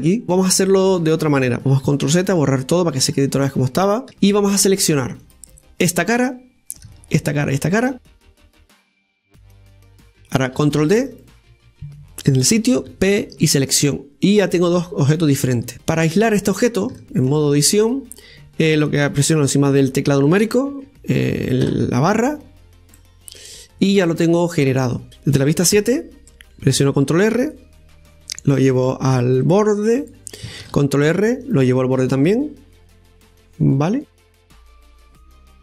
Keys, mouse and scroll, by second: 0.8-3.0 middle drag, 3.0 ctrl+z, 3.3-4.0 ctrl+z, 4.9-6.1 middle drag, 6.1 click, 6.7 right click, 7.2 middle click, 8.1-9.7 shift+right drag, 9.7-11.7 middle drag, 16.2 right click, 16.5 right click, 17.2-17.9 scroll down 6, 17.9-20.9 shift+middle drag, 22.5 KP_Divide, 23.8-25.1 middle drag, 25.6 ctrl+z, 26.6 KP_7, 27.9 ctrl+r, 31.5 ctrl+r.